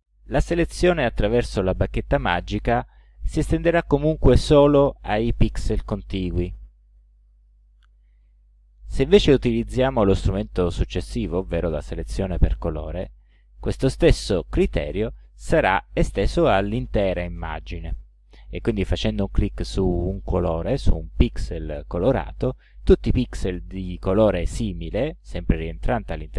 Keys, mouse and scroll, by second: 11.3 click, 15.1 click.